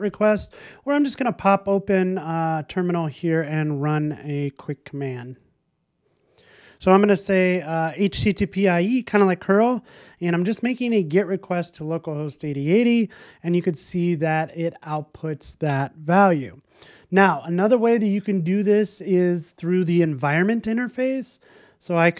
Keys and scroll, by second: 16.3 shift+Escape.